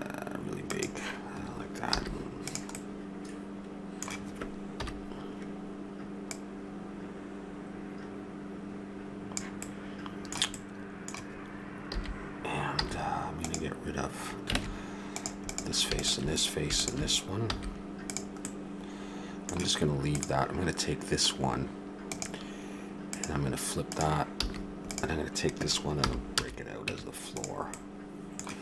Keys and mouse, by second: 1.9 z, 4.7 KP_1, 9.6-12.2 middle drag, 11.9 a, 12.8 z, 14.5 ctrl+Tab, 17.5 x, 18.4 click, 20.1 click, 24.4 a, 24.9-26.6 right drag, 26.0 p, 26.9 Tab, 27.7-28.6 right drag.